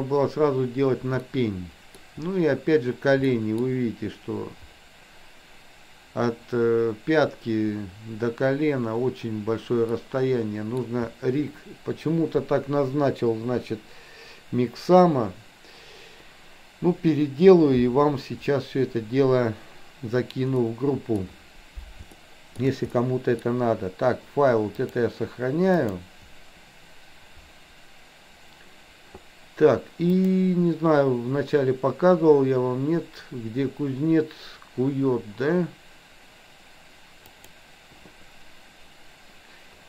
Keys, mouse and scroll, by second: 1.2-2.0 middle drag, 3.4-3.7 middle drag, 10.0-10.7 middle drag, 20.6-21.1 middle drag, 22.2 shift+middle click, 22.9 middle click, 24.9-26.0 drag, 30.1-38.4 drag.